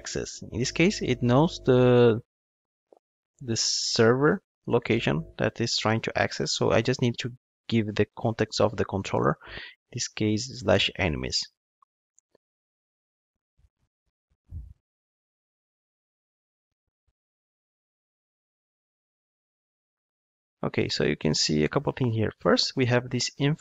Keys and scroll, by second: 11.4 ctrl+shift+d.